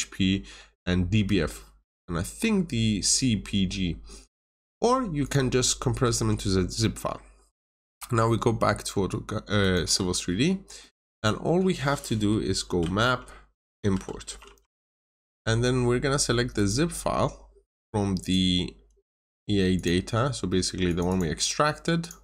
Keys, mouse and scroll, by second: 7.9 alt+Tab, 9.5 alt+click, 10.8 middle click, 12.5-14.9 typing, 15.0 Return, 16.5 click, 21.0 double click, 21.9 click.